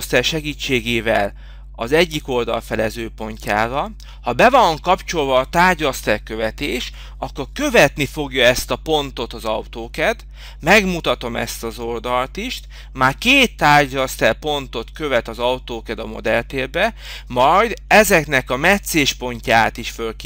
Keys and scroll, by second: 3.1 f, 8.7 4, 10.0 Return.